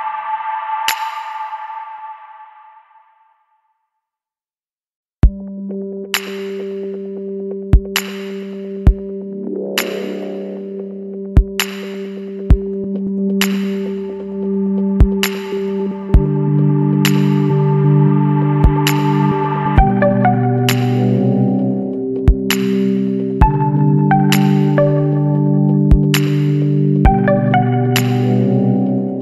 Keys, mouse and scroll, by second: 1.5 click, 3.0 click, 4.4 click, 4.8 Escape, 5.5 click, 6.8 click, 8.4 KP_6, 8.7 KP_Enter, 10.0-10.5 scroll down 1, 11.2-11.5 scroll up 1, 13.3 click, 14.1 click, 15.5 click, 18.5 click, 19.6 click, 20.2 Escape, 21.5 click, 22.9 click, 24.2 click, 25.9 click, 26.9 click, 28.1 click.